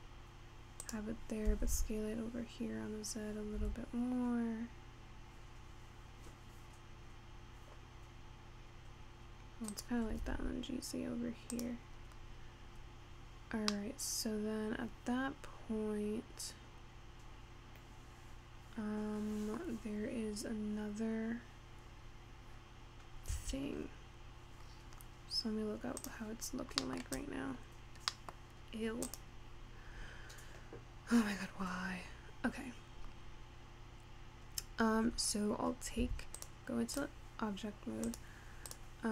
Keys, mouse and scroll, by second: 1.5 s, 10.1 g, 12.3-13.3 scroll down 3, 13.8-16.9 middle drag, 19.9-20.4 scroll up 5, 20.9-22.1 scroll down 1, 22.1-22.8 scroll down 1, 22.8 scroll up 3, 23.1-23.5 scroll down 1, 24.6-26.1 scroll down 12, 26.1 click, 26.6-26.9 scroll down 3, 26.9 middle click, 27.1 scroll up 1, 27.3 click, 28.2 middle click, 29.1 click, 29.9-32.9 scroll down 2, 33.2-33.6 scroll up 3, 36.0 Tab, 36.4 click, 37.0 click, 38.1 click, 38.7 click.